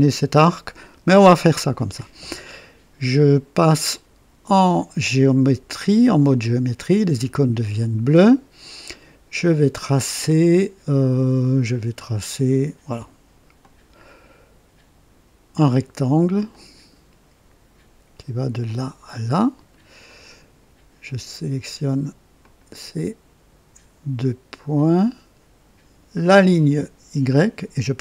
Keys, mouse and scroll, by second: 6.2 click, 13.5 click, 16.4 click, 18.6 click, 19.3 right click, 20.0 right click, 22.3 click, 24.9 click, 26.2 click.